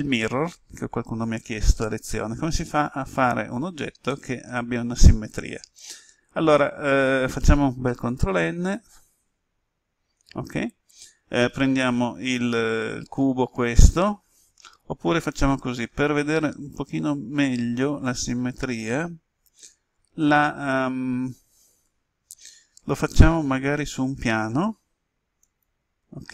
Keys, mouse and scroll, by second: 4.0-6.6 middle drag, 7.9 ctrl+n, 9.0 Return, 15.8 Delete, 21.8 Return, 23.7 shift+a, 25.4-26.3 drag.